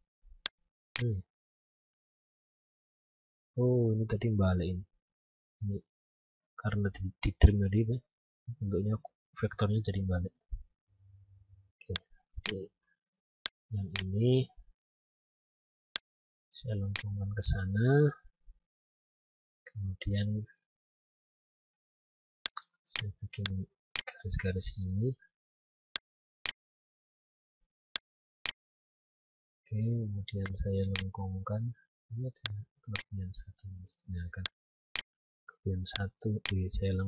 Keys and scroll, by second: 1.6 ctrl+z.